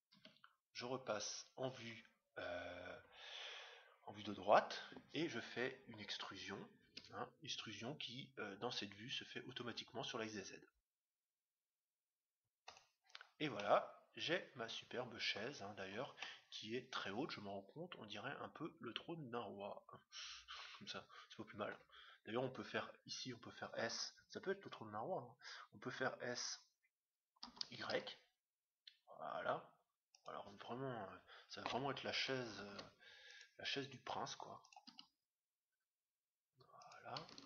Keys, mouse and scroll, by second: 0.1 KP_3, 2.0-3.3 middle drag, 3.3-3.6 scroll down 1, 6.8 e, 13.5-15.3 middle drag, 15.7-18.0 middle drag, 27.4 s, 32.6 ctrl+r, 35.0 s.